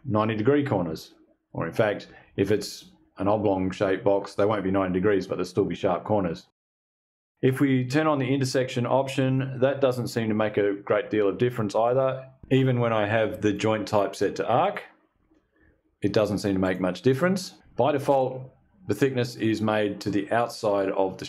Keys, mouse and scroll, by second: 8.7 click, 11.3 click, 12.9 click, 14.1 click, 16.1 click.